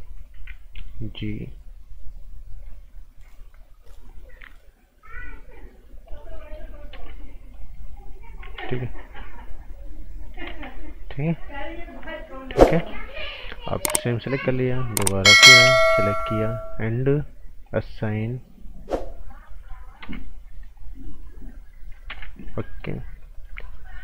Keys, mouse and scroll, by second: 0.3 g, 0.8 click, 5.0 click, 6.3 right click, 6.7 scroll down 1, 6.9 z, 7.5 click, 8.5 z, 9.2 click, 10.4 ctrl+z, 11.3 click, 12.6 ctrl+z, 13.3 right click, 13.4-14.2 scroll up 1, 14.4 alt+right click, 15.5 t, 15.8 click, 19.3 scroll down 1, 19.4 right click, 20.0 z, 20.7 click, 22.1 ctrl+z, 22.3 scroll down 1, 22.6 right click, 22.9-23.3 scroll up 1, 23.3 click.